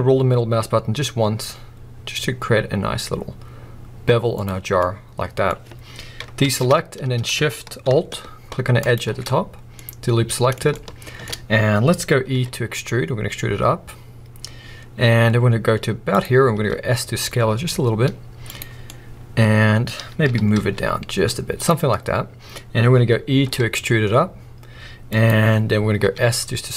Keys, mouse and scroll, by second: 4.4 click, 4.6 scroll down 1, 4.8 middle click, 5.4-6.1 scroll up 1, 6.4 alt+a, 8.8 alt+shift+click, 9.8 middle click, 10.7 shift+middle click, 12.3 e, 16.2 click, 16.5 s, 18.5 click, 18.9-21.7 middle drag, 20.3 g, 21.7 click, 21.8 scroll up 1, 21.9-25.2 middle drag, 23.4 e, 25.2 click, 26.0 s.